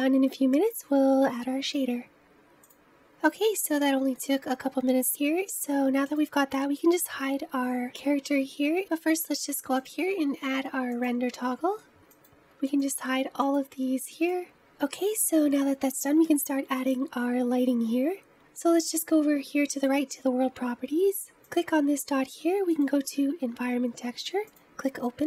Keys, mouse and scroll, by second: 2.6 click, 2.9-4.4 scroll down 2, 4.4-6.0 scroll up 1, 6.0 click, 9.8-11.3 drag, 12.1 click, 12.8 click, 13.4 click, 14.6-16.3 scroll up 1, 16.3-18.5 scroll down 1, 19.7 click, 21.4-25.2 drag.